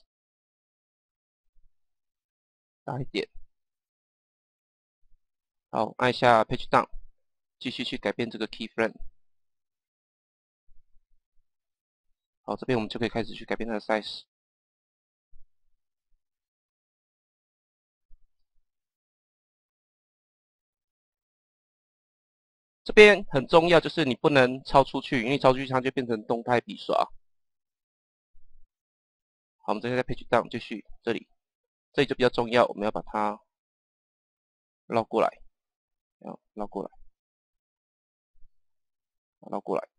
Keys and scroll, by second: 1.2 Page_Down, 6.5 Page_Down, 8.6 Page_Down, 14.3 Page_Down, 18.1 Page_Down, 24.2 Page_Down, 29.6 Page_Down, 35.1 Page_Down, 37.9 Page_Down.